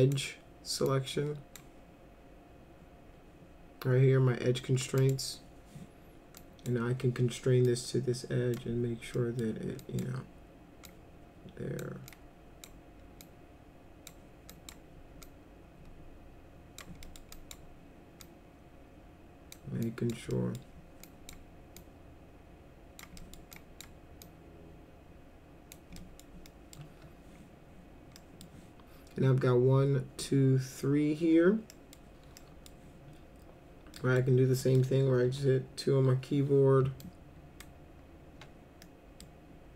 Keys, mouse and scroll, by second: 0.9-1.6 drag, 5.0 click, 6.4 drag, 7.7 click, 9.2 middle drag, 9.8 drag, 10.8 click, 12.1 click, 13.2 click, 14.5 click, 15.2-16.8 drag, 17.0 middle click, 17.4 click, 18.2-19.5 drag, 19.8 drag, 20.3 middle drag, 21.1 drag, 21.8-23.0 drag, 23.2 middle drag, 23.5 drag, 24.2-25.7 drag, 26.0 middle drag, 26.5 middle drag, 28.2 middle drag, 31.7 middle drag, 32.4 middle drag, 34.0 middle drag, 34.6 middle click, 35.3 2, 37.0 ctrl+click, 38.8 middle click.